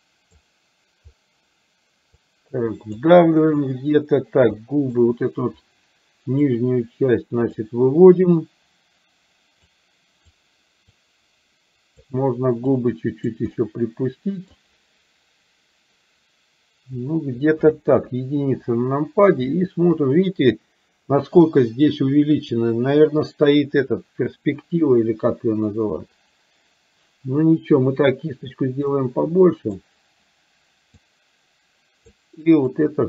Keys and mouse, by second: 2.2 click, 4.6 shift+middle click, 6.6-7.7 drag, 9.8 click, 11.1-12.2 drag, 12.7 click, 13.7-14.7 middle drag, 17.9 KP_1, 28.9 click, 31.1-32.2 drag, 32.8 click.